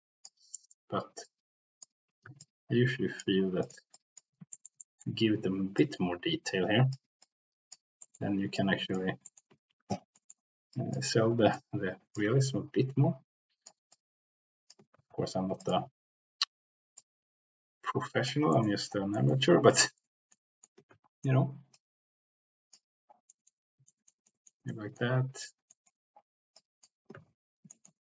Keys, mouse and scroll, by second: 0.5 middle click, 1.2 click, 2.4 ctrl+z, 2.4 click, 3.6 click, 3.9 click, 4.5 shift+middle click, 4.9 middle click, 5.7-6.9 drag, 7.2 click, 8.0 middle click, 8.5 click, 9.2 middle click, 9.6 ctrl+z, 9.7 ctrl+z, 10.1 middle click, 10.7 click, 11.5-12.1 scroll up 1, 12.3 ctrl+z, 12.5-13.6 drag, 13.8-14.7 scroll up 1, 14.9 ctrl+z, 15.6 click, 16.9 middle click, 17.9 click, 17.9 c, 18.5 middle click, 19.1 middle click, 19.8 middle click, 20.2 middle click, 21.0 ctrl+z, 21.7-22.7 drag, 23.2 middle click, 23.8 middle click, 23.8 c, 24.2 middle click, 24.7 middle click, 25.6 middle click, 26.5 click, 27.1 ctrl+z, 27.6 shift+middle click.